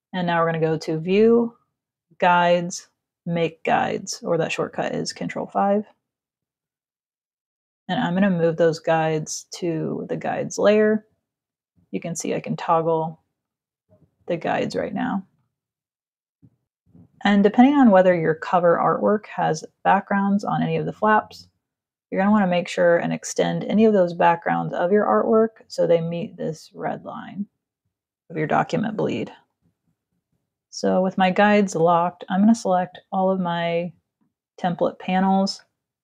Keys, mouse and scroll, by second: 0.2 click, 5.7 click, 8.3 click, 11.0 click, 13.1 click, 15.1 click, 25.7 z, 25.9 click, 26.7 v, 29.1 ctrl+0, 32.3 click.